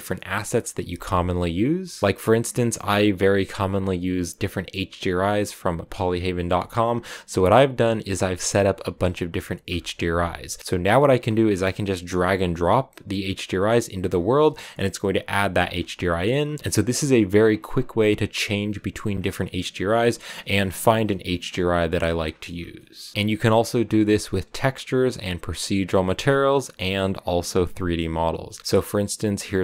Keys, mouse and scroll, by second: 0.7 middle click, 1.5 z, 1.8 shift+middle click, 2.0-3.6 scroll up 1, 11.2 click, 12.0 click, 14.0 click, 14.4-16.1 middle drag, 16.1 click, 17.6 click, 18.3 click, 18.9-19.4 scroll down 2, 19.4 click, 20.1-22.3 middle drag, 22.3 scroll down 1, 22.8-29.6 shift+middle drag.